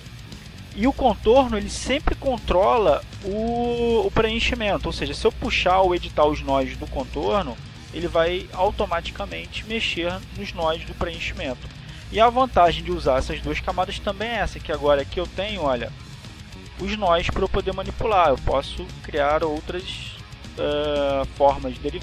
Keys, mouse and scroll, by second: 1.9 click, 6.7 click, 8.5 click, 18.4-19.9 drag, 20.4 click, 21.7 click.